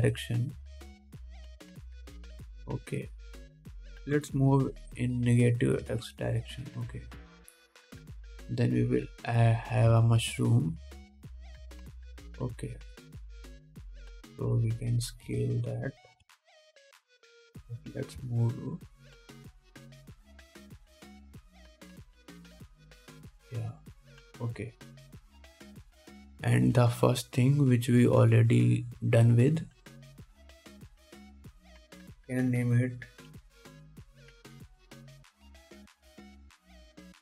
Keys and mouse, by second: 5.3 g, 7.1 ctrl+Tab, 7.8 middle click, 7.9-9.2 drag, 9.2 middle click, 9.3-10.3 drag, 10.3 middle click, 10.3-12.0 drag, 12.0-13.4 middle drag, 13.4-13.8 drag, 13.8-17.0 middle drag, 14.6 KP_7, 16.5 s, 17.0-21.3 drag, 17.5 KP_1, 18.1 g, 23.8 g, 26.2 ctrl+s, 27.9 middle click, 30.1 middle click, 31.8 middle click, 31.8 click, 32.2 click, 35.5 BackSpace, 36.4 o.